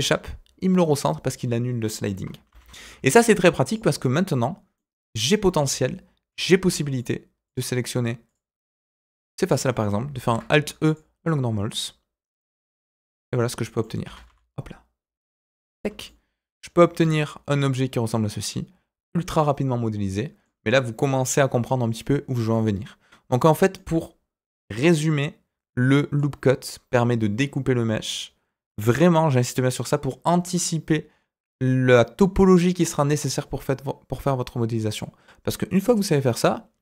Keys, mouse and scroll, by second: 2.4 ctrl+z, 3.6 click, 4.7 middle click, 6.3 alt+click, 6.9 alt+shift+click, 7.4 alt+shift+click, 8.2 alt+shift+click, 8.8 alt+shift+click, 10.2 alt+e, 12.5-13.8 middle drag, 14.0 s, 18.3-20.4 middle drag, 23.1-23.7 scroll down 1, 23.7-26.1 middle drag.